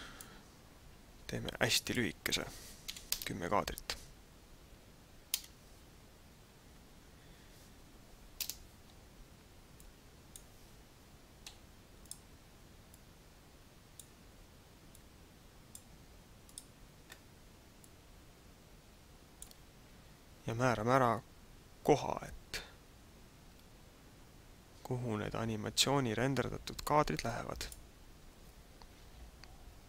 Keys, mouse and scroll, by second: 1.8 click, 8.6 KP_0, 9.8 click, 11.4 i, 12.9 click, 14.9 click, 15.9 i, 17.8 click.